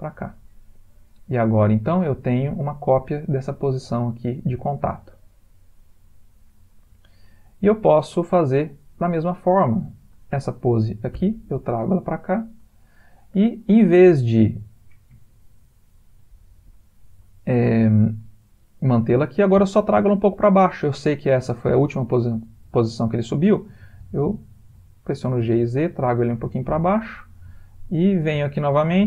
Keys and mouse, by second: 1.1 click, 3.4 click, 9.4 click, 11.1 shift+d, 15.9 click, 24.4 g, 28.2 click.